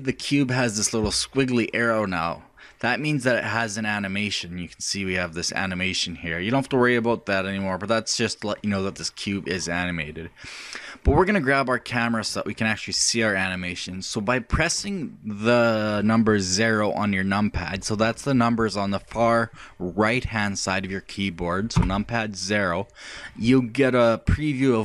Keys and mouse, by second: 0.1-13.2 drag, 13.4-18.6 drag, 21.8 KP_1, 21.8 KP_0.